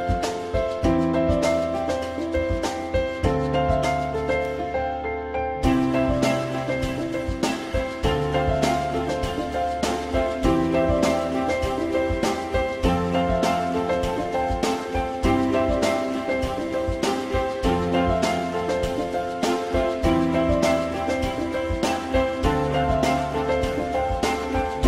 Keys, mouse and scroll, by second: 5.8 alt+middle click, 12.7 z, 12.9 alt+middle click, 13.5 F4, 14.0 alt+middle click, 18.4 alt+scroll down 1, 19.8 alt+middle click, 22.1 alt+middle click.